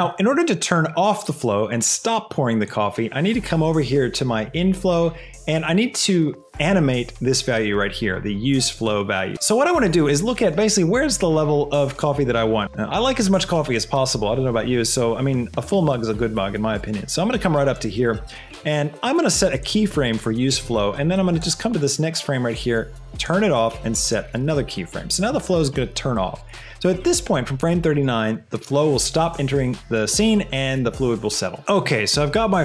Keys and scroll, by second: 31.6 shift+space.